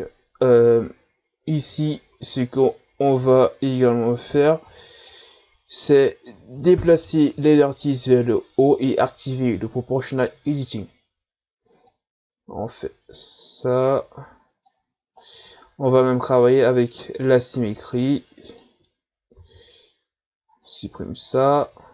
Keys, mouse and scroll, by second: 0.4-1.4 scroll up 2, 1.9-2.3 shift+scroll up 1, 2.3 Tab, 3.3 z, 4.1 right click, 4.3 b, 7.0 o, 11.9-15.6 drag, 15.6-17.3 scroll down 3, 17.3 right click, 17.6 b, 19.4 x.